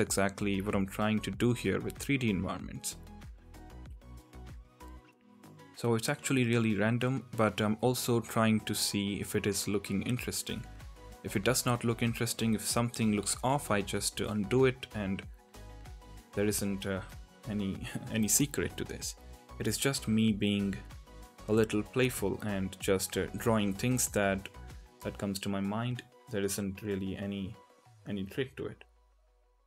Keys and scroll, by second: 0.6 ctrl+z, 2.3 ctrl+z, 4.7 ctrl+z, 11.8 ctrl+z, 12.7 ctrl+z, 15.7 ctrl+z, 16.0 ctrl+z, 16.0 ctrl+z, 16.2 ctrl+z, 17.7 ctrl+z, 18.1 ctrl+z, 20.1 ctrl+z, 21.1 ctrl+z, 21.2 ctrl+z, 21.4 ctrl+z, 26.8 ctrl+z, 27.1 ctrl+z, 29.0 ctrl+z, 29.5 ctrl+z.